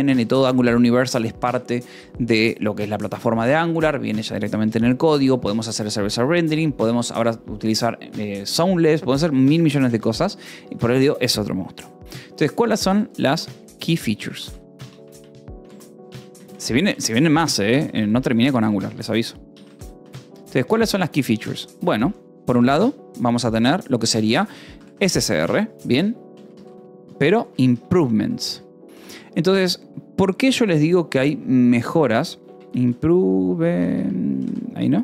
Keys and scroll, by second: 0.1 ctrl+s, 0.2 k, 5.4 j, 9.0 j, 10.9 Return, 13.1 space, 14.3-20.3 typing, 20.4 Escape, 21.0 Return, 21.9 BackSpace, 22.1 -, 22.4 space, 25.2-28.6 typing, 29.5 ctrl+s, 31.1-33.7 typing, 33.9 Escape, 34.7-35.0 typing.